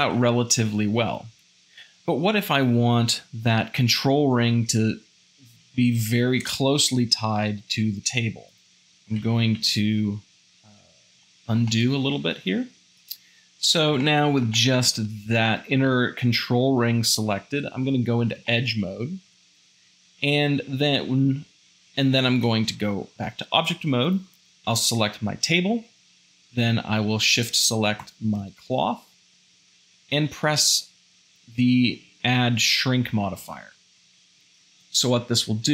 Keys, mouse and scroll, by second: 8.7 ctrl+z, 11.2-13.3 shift+middle drag, 14.1-16.1 shift+middle drag, 18.5 shift+middle click, 19.3 2, 23.2 Tab, 28.0-29.3 shift+drag.